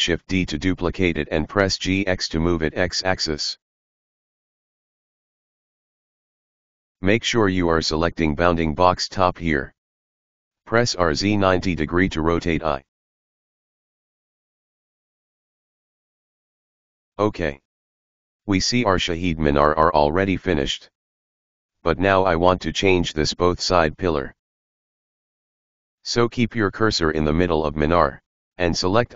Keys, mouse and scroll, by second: 1.3 shift+d, 7.3-10.5 drag, 10.6 r, 15.1-16.0 scroll up 1, 16.0-16.8 scroll up 1, 16.8-17.4 scroll up 2, 22.9-24.3 scroll down 7, 24.3-26.2 middle drag, 26.2 click, 28.8-29.1 drag.